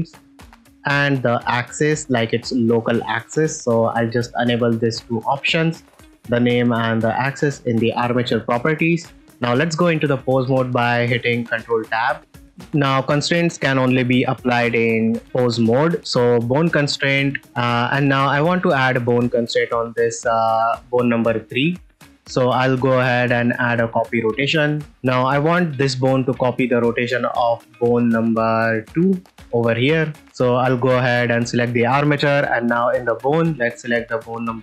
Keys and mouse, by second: 2.1-3.2 ctrl+drag, 11.7 ctrl+Tab, 12.3 ctrl+s, 16.6 click, 17.5 middle click, 17.9 ctrl+middle click, 18.3 middle click, 21.9-24.0 drag, 24.7 shift+middle drag, 26.5 middle click, 27.1-27.8 ctrl+middle drag, 29.1 ctrl+middle drag, 30.1 click, 33.3-34.3 drag.